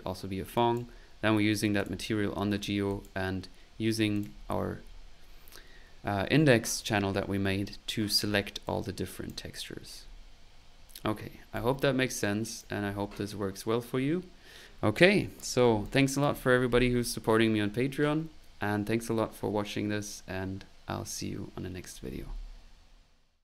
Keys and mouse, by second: 0.5 click, 1.8 click, 2.5 middle click, 2.9 click, 4.1 click, 8.6 click, 11.0 middle click, 11.5-12.7 drag, 15.8 click, 22.8 typing.